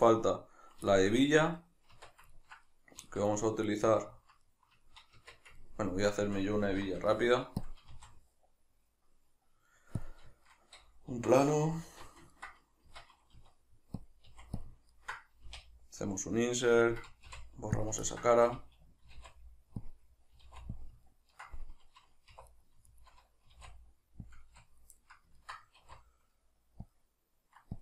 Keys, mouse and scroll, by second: 0.9-3.7 shift+middle drag, 2.0 Tab, 3.7 right click, 4.1 ctrl+middle click, 5.2 Tab, 5.6 ctrl+middle click, 6.7 alt+q, 6.7-7.7 middle drag, 7.7 click, 7.9 shift+a, 10.3-14.1 shift+middle drag, 11.9 alt+q, 12.9 Tab, 13.4 s, 14.1 click, 14.3 s, 14.7 click, 15.0-17.0 ctrl+middle drag, 15.5 typing, 17.0 click, 17.3 x, 18.1-19.9 ctrl+middle drag, 18.3 a, 19.9 click, 20.4 s, 20.9 click, 21.1-22.5 ctrl+middle drag, 22.3 2, 22.5 right click, 22.9 shift+right click, 23.5 s, 24.4 click, 24.5 a, 25.0-27.8 middle drag, 25.8 alt+e.